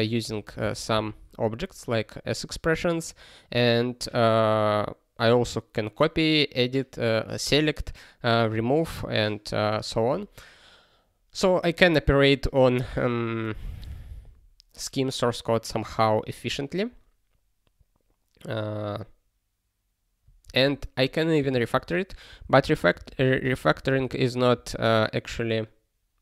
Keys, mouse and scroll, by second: 0.6 ctrl+alt+b, 0.9 ctrl+alt+b, 20.4 ctrl+e, 21.3 ctrl+b, 21.7 ctrl+space, 22.1 ctrl+b, 22.3 ctrl+b, 22.5 ctrl+b, 22.7 ctrl+b, 23.0 ctrl+b, 23.1 ctrl+b, 23.3 ctrl+b, 23.4 ctrl+b, 23.6 ctrl+b, 23.8 ctrl+b, 23.9 ctrl+b, 24.5 ctrl+g.